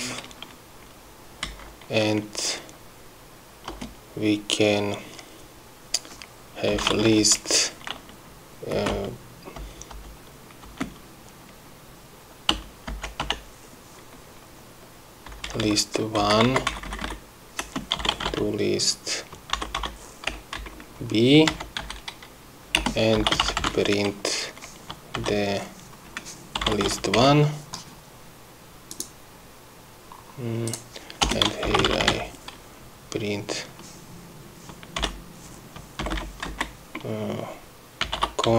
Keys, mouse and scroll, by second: 1.9 Right, 4.1 Return, 7.0-8.0 typing, 9.2 space, 9.4 =, 10.1 BackSpace, 11.2 space, 13.0 =, 13.4 BackSpace, 15.8 Left, 16.7 Right, 17.0 1, 17.2 Right, 18.1-19.2 typing, 21.1 BackSpace, 22.0 b, 22.3 End, 23.3 Return, 23.5-24.7 typing, 26.9-28.2 typing, 29.4 click, 31.2 click, 31.8 Return, 31.9-33.1 typing, 37.0 shift+Left, 38.3-38.5 typing.